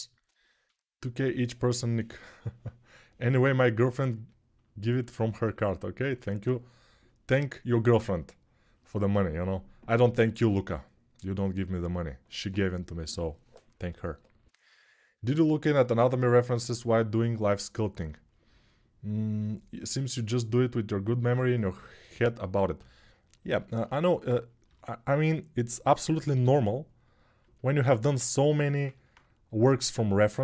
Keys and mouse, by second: 5.1-27.6 ctrl+alt+drag, 24.4 g, 26.1 g.